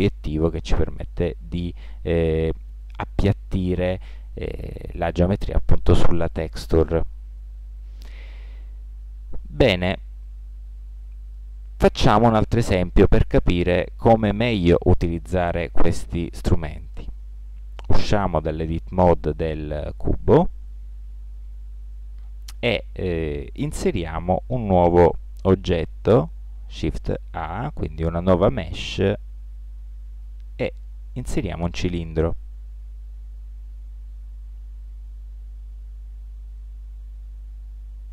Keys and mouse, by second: 9.4-10.9 middle drag, 17.6 Tab, 26.1 shift+a, 36.6-38.1 middle drag.